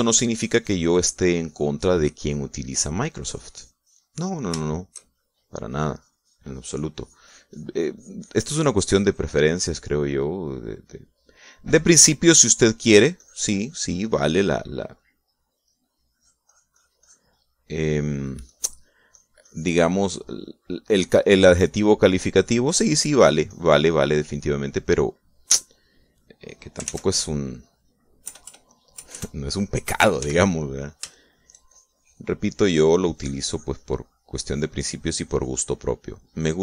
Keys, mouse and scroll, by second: 1.9 shift+middle click, 2.5-3.5 shift+drag, 3.5 middle click, 4.3-5.6 drag, 5.1 right click, 6.5 shift+middle click, 6.7-10.5 shift+drag, 11.2 middle click, 11.5-12.8 middle drag, 13.3-15.1 drag, 16.5 middle click, 18.5 middle click, 19.5-21.3 drag, 21.3 middle click, 22.3 click, 22.8 middle click, 23.5 middle click, 23.9-25.1 drag, 25.5-27.3 drag, 27.9 ctrl+s, 29.3 KP_Add, 31.3 f, 31.8 shift+click, 32.1 shift+middle click, 32.2 shift+click, 32.7 shift+middle click, 32.7-36.6 shift+drag.